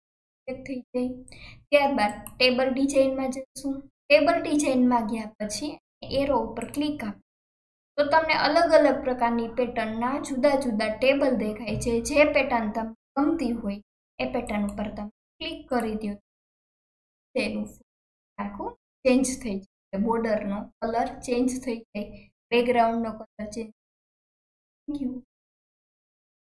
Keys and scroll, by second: 26.2 alt+KP_1.